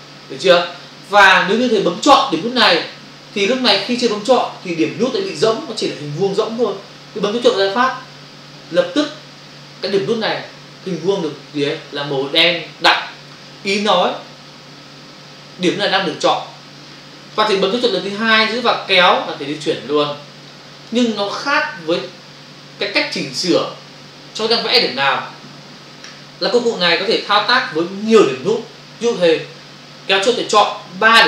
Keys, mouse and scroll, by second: 3.6 space, 3.8 click, 3.9 space, 4.2 ctrl+click, 8.8 click, 18.9 click, 26.7 space, 30.4 click.